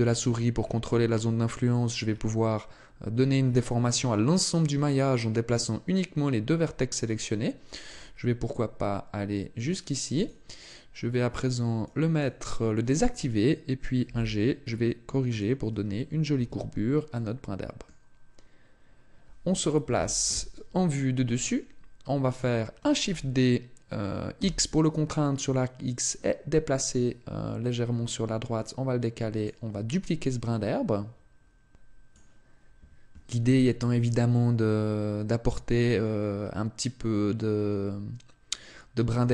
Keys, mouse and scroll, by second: 10.2 click, 11.3 click, 14.0 g, 15.4 click, 16.4 Tab, 17.1 middle click, 20.0 KP_7, 21.5 shift+middle click, 23.0 shift+d, 29.4 click.